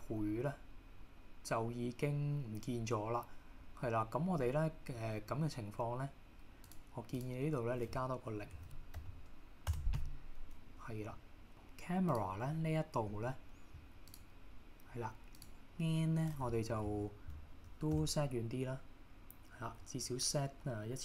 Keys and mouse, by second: 6.8-10.2 drag, 12.2 click, 14.2-21.0 drag.